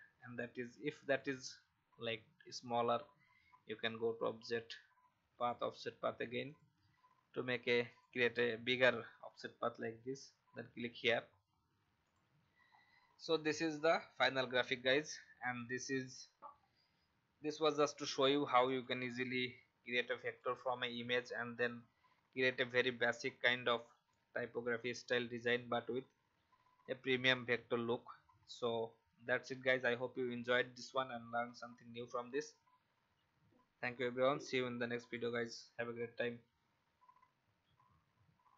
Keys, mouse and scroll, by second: 0.2-1.1 alt+scroll down 1, 1.1 click, 11.3-11.6 alt+scroll down 1, 12.0 click, 12.7-13.3 scroll up 1, 13.3 click, 14.5 alt+scroll up 1, 15.4 click, 16.4-16.7 scroll up 1, 17.6-21.3 drag, 29.4 click.